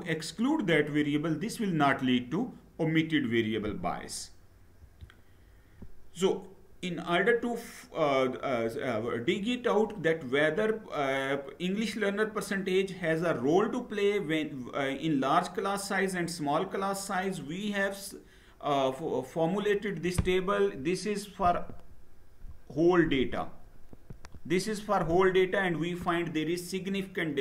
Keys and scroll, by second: 4.5 Down.